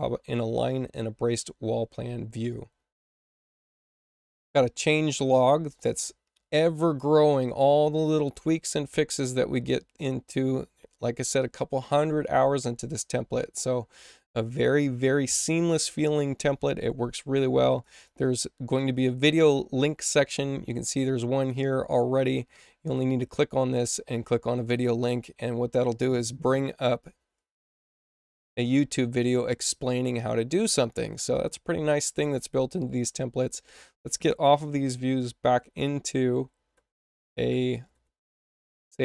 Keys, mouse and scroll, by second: 4.1 click, 4.3 click, 17.6 click, 17.8 click, 21.0 click, 24.0 click, 26.9-28.9 drag, 31.1 click, 35.5 ctrl+w, 36.3 ctrl+w, 36.7 ctrl+w, 37.5 ctrl+w, 38.2 ctrl+w, 38.5 ctrl+w.